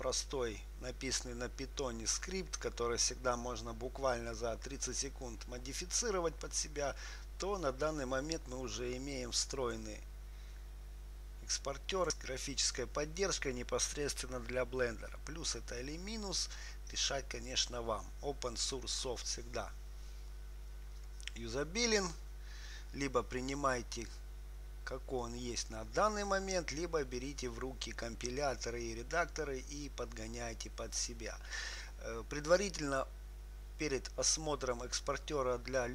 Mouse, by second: 9.7-12.2 drag.